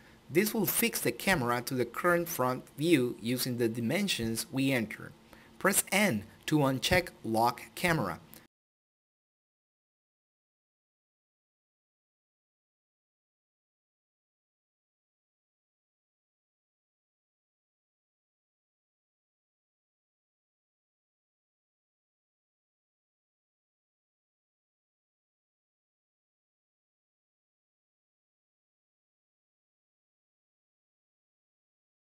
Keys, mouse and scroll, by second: 8.5 n, 10.9 ctrl+n, 11.1 ctrl+click, 20.4 click, 24.2 n, 26.7 scroll down 1, 29.3-31.2 scroll up 1.